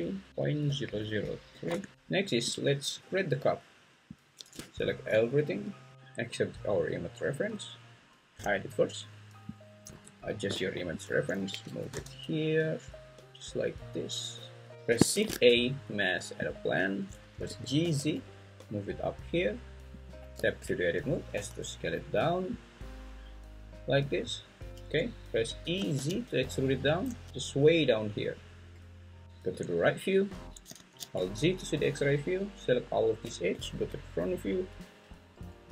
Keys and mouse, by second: 0.9 0, 2.1 click, 8.4 h, 9.8 Tab, 11.5 g, 11.9 x, 15.1 shift+a, 17.5 g, 17.8 z, 20.3 Tab, 21.3 s, 25.6 e, 25.9 z, 28.4 click, 30.8 alt+z, 32.1 click, 33.5 `.